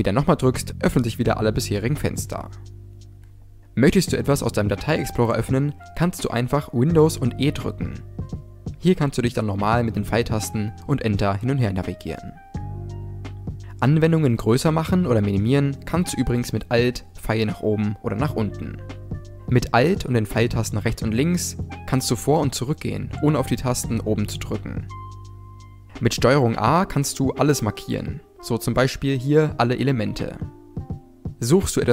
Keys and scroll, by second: 5.6 super+e, 16.4 alt+Up, 18.0 Down, 20.2 alt+Left, 21.5 Right, 26.3 ctrl+a.